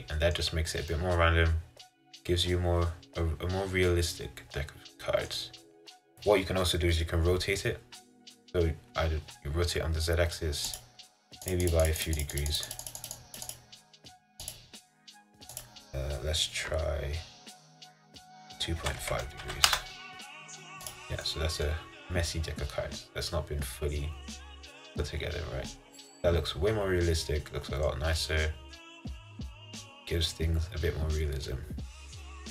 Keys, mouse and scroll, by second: 0.7-1.0 scroll up 2, 1.0-4.0 middle drag, 10.9-19.8 drag, 21.0 click, 21.3 middle click, 22.0-22.4 scroll down 1, 22.4-25.4 middle drag, 28.4-31.3 middle drag, 32.2-32.5 middle drag.